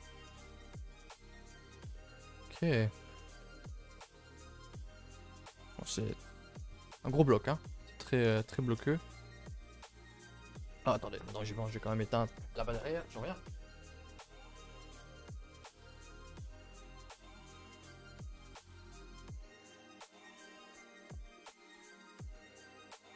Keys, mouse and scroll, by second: 12.2-13.7 scroll up 1, 13.7-15.4 scroll up 1, 15.4-17.6 scroll up 1, 17.6-18.5 scroll up 1, 18.5-20.8 scroll up 1, 20.8-23.1 scroll up 1.